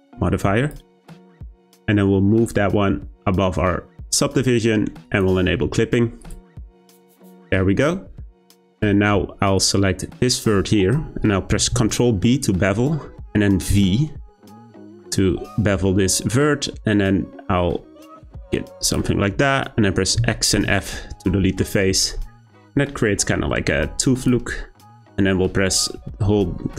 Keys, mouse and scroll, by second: 0.7-1.3 drag, 2.4-4.1 drag, 5.0 click, 6.2 click, 6.9-9.6 scroll up 3, 9.6 click, 11.7 b, 20.2 x, 22.0 click, 24.2 click, 24.7-26.4 scroll up 2, 26.4-26.7 scroll up 2.